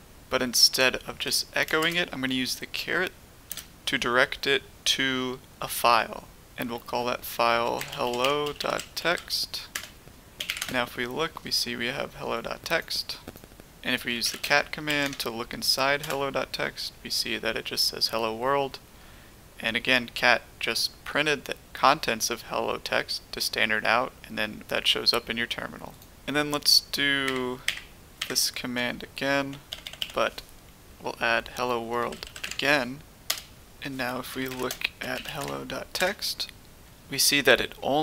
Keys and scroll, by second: 1.1-1.7 typing, 3.4 space, 7.5-10.8 typing, 9.7 Return, 13.8-16.5 typing, 27.6 Up, 28.1 Up, 28.7 Left, 29.2 Left, 29.2 Left, 30.8-35.7 typing, 36.0 Return.